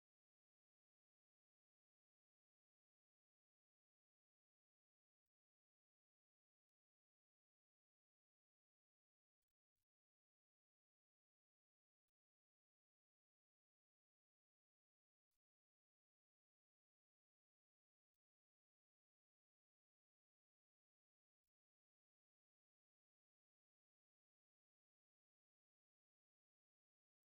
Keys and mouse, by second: 0.5 ctrl+b, 2.1 ctrl+z, 3.2 ctrl+r, 9.2 middle click, 10.0 middle click, 12.7 1, 13.2 right click, 14.2 right click, 14.6 middle click, 15.4 shift+middle click, 15.8 ctrl+middle click, 16.2 middle click, 18.8 right click, 19.2 shift+right click, 19.9 right click, 21.0 f, 21.4 middle click, 22.8 2, 23.1 right click, 23.9 f, 24.5 middle click, 24.9 f, 25.4 shift+middle click, 25.7 f, 26.2 middle click, 27.2 ctrl+middle click.